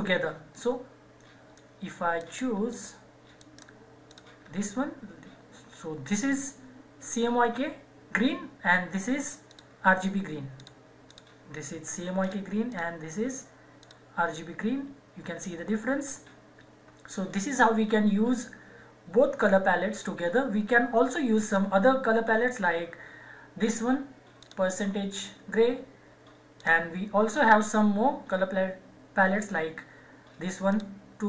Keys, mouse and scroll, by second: 1.5 click, 2.1 right click, 2.7 click, 3.3 right click, 4.1 click, 9.4-17.9 drag, 24.4 click, 30.6 click, 30.7 click.